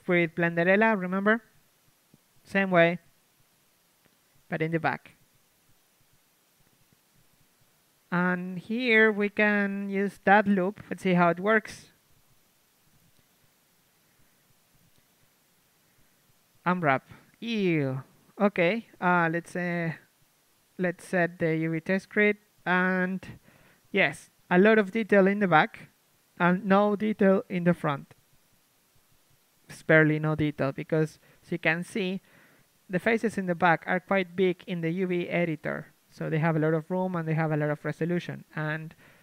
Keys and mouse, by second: 1.0 Tab, 1.6 a, 4.2-7.6 drag, 4.7-7.6 right drag, 7.6 middle click, 8.6-11.4 right drag, 10.4-12.0 drag, 11.4 ctrl+e, 12.2 a, 12.6 middle click, 13.6 ctrl+Tab, 14.9 l, 15.6 shift+space, 17.2 u, 17.8 a, 22.2 click, 22.7 KP_1, 23.0 Tab, 23.5 shift+space, 24.1 KP_3, 26.4 Tab, 28.2 KP_3, 30.0 shift+space, 33.5-34.9 drag, 34.9 ctrl+KP_1, 34.9 g, 35.4-36.9 drag, 35.4 g, 36.9 g.